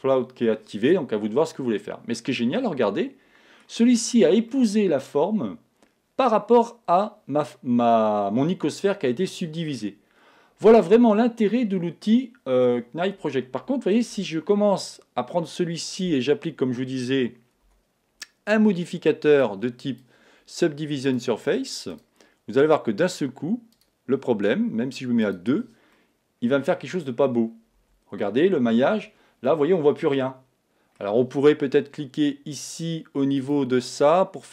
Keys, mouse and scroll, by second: 2.1-6.4 middle drag, 9.2-11.6 middle drag, 13.0-14.8 middle drag, 14.0 Tab, 14.8 middle click, 17.6 n, 19.5 click, 25.9-31.3 middle drag, 27.8 Tab, 29.1 Tab.